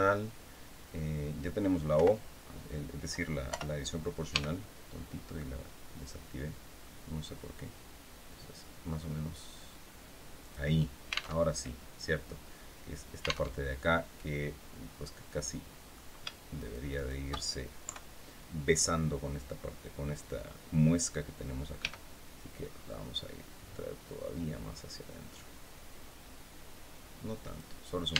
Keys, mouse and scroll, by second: 1.6 o, 3.2 o, 4.0 g, 4.8-5.1 scroll down 2, 5.3 scroll down 2, 5.9 scroll down 2, 6.4 scroll down 2, 7.1 scroll down 2, 10.1 click, 11.0 alt+Tab, 13.2 alt+Tab, 15.1 click, 16.3 shift+right click, 17.5 KP_3, 21.5 g, 22.4-22.7 scroll down 2, 23.3 scroll down 2, 27.1 click, 27.9 Tab.